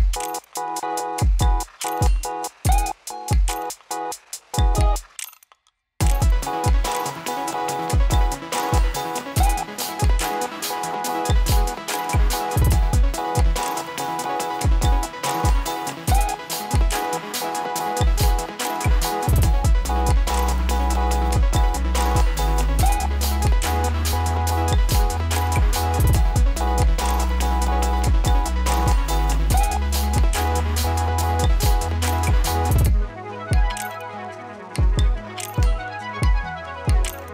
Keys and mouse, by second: 0.6 click, 1.0 [, 1.3 space, 2.1 click, 2.4 [, 3.0-6.9 drag, 6.9 space, 11.0 ctrl+d, 12.1 click, 13.1 ctrl+a, 14.0 ctrl+d, 14.9-20.2 drag, 20.2 space, 22.7-24.2 drag, 24.6 ctrl+z, 27.0-35.3 drag, 35.3 space, 37.1-37.3 drag.